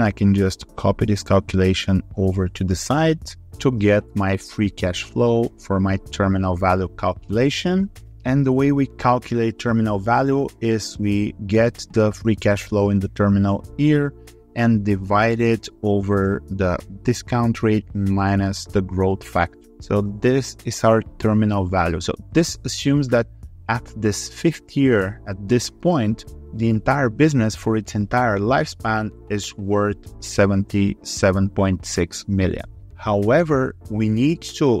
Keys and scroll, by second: 0.3 ctrl+r.